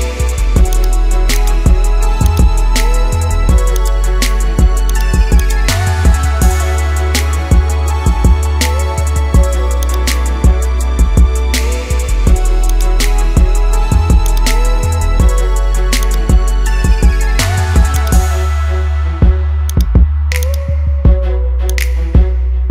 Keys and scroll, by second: 2.9 ctrl+0.